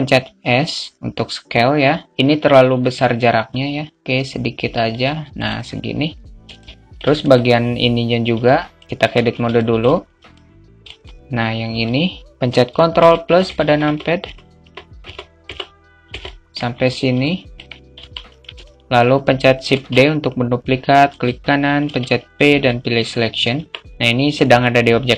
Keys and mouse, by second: 5.7 click, 6.9 shift+a, 7.0 alt+shift+middle click, 7.5 click, 8.8 Tab, 9.5 Tab, 9.9 alt+shift+middle click, 10.7 middle click, 11.4 click, 12.3 alt+middle click, 13.8 ctrl+KP_Add, 14.0 ctrl+KP_Add, 14.3 ctrl+KP_Add, 14.5 ctrl+KP_Add, 15.1 ctrl+KP_Add, 15.6 ctrl+KP_Add, 17.1 ctrl+KP_Add, 17.9 middle click, 19.2 alt+shift+middle click, 23.6 p, 23.9 Tab.